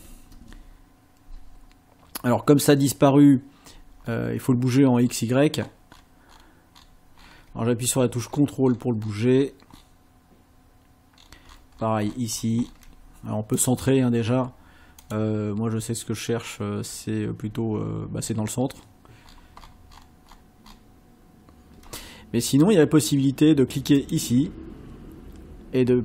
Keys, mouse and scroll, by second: 0.3 Return, 4.0-4.4 ctrl+scroll up 2, 4.6-5.3 ctrl+scroll down 4, 5.6-7.5 ctrl+scroll up 10, 8.0 ctrl+scroll down 2, 8.8-9.6 ctrl+scroll down 4, 9.7 ctrl+scroll down 2, 11.2-12.0 ctrl+scroll down 2, 13.6 click, 15.0 click, 18.2 ctrl+scroll up 2, 19.3-20.2 ctrl+scroll up 4, 20.3-21.0 ctrl+scroll up 4, 24.0 click.